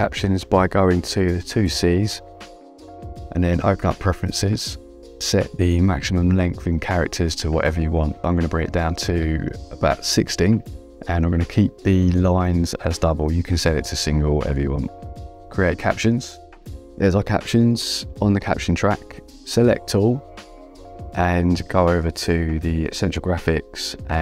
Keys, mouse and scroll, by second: 0.0 Return, 0.0 KP_Enter, 3.2 click, 4.9 click, 8.2 click, 16.0 click, 19.4 v, 19.9 click.